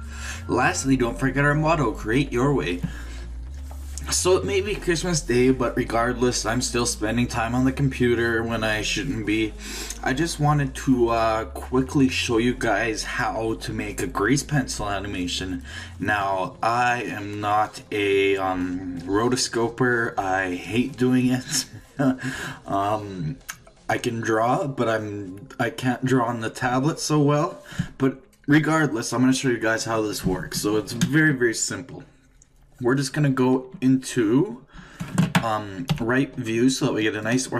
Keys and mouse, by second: 37.2 click.